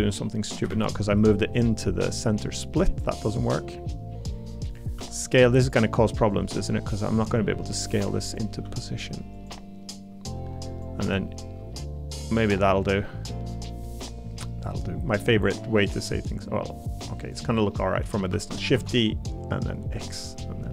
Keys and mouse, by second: 0.7 ctrl+z, 1.6 click, 3.1 click, 4.9 s, 6.3 click, 8.6 s, 9.3 click, 12.8 click, 13.8 middle click, 15.1 middle click, 17.7 middle click, 18.3 shift+d, 18.7 x.